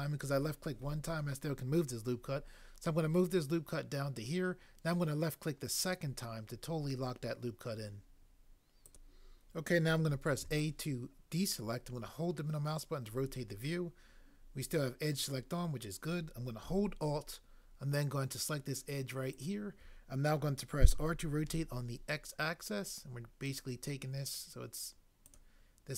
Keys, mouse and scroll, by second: 10.4 a, 20.9 r, 21.5 x.